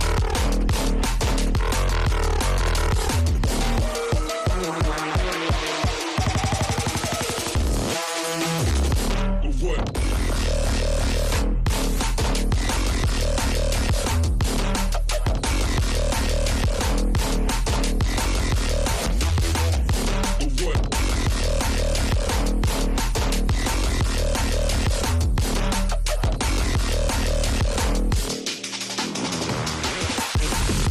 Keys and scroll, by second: 4.6 space, 8.8 space, 10.6 space, 13.3 F3, 13.6 Escape, 17.0 ctrl+r, 18.3 Delete, 20.8 F2, 21.7 Escape, 22.7 ctrl+z, 26.1 g, 30.0 space.